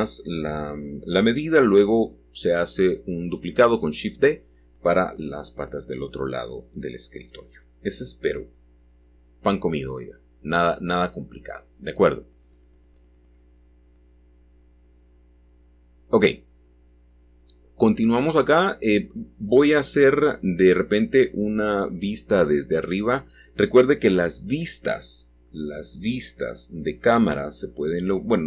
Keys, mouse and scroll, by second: 1.3 click, 3.5 g, 7.8 click, 9.3 click, 12.6 g, 16.2 shift+click, 18.0-19.0 middle drag, 19.7-20.8 middle drag, 21.6 g, 24.4 x, 26.1 click, 26.7 middle click, 27.2 middle click, 28.2 click.